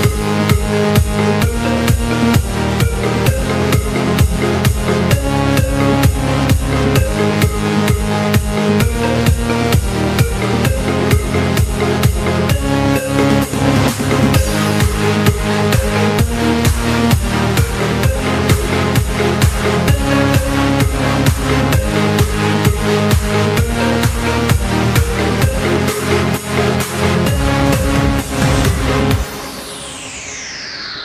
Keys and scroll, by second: 0.5 g, 1.1 c, 1.3 ctrl+shift+v, 1.8 p, 4.1 z, 8.9 v, 13.1 v, 13.9 ctrl+z, 14.1 ctrl+p, 14.5 ctrl+shift+v, 17.1 Down, 18.2 ctrl+shift+v, 18.3 s, 25.0 v, 28.8 z.